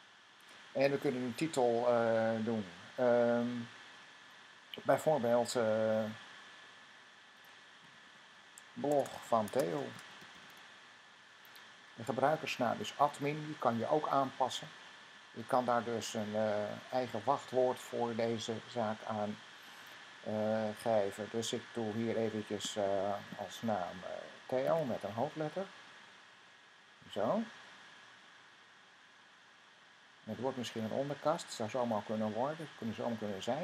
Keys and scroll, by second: 7.5-10.8 typing, 24.5-25.1 typing, 27.9 Right.